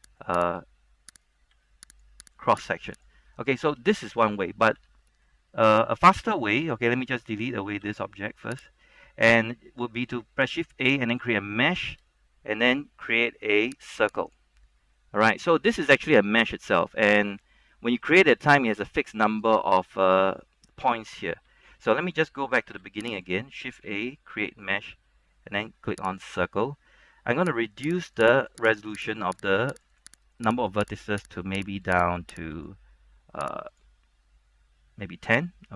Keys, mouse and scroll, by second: 0.1 g, 0.2 right click, 1.7 g, 2.1 click, 2.4 right click, 2.7 g, 3.1 click, 4.2 middle click, 4.9 Tab, 5.2 middle click, 6.2 scroll up 1, 6.4-8.0 scroll down 1, 8.0 x, 8.7 click, 10.7 shift+a, 14.2 click, 15.1 middle click, 15.8 Tab, 16.2 middle click, 18.4-20.6 scroll up 1, 20.6 middle click, 21.6 Tab, 22.8 x, 23.2 click, 24.0 shift+a, 26.4-31.6 drag.